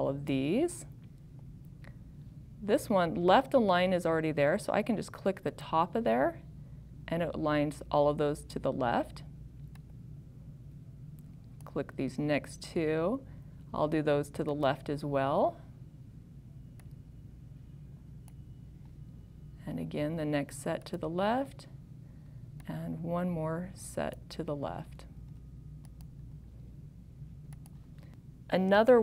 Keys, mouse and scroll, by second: 10.3 click, 22.9 click, 27.6 click.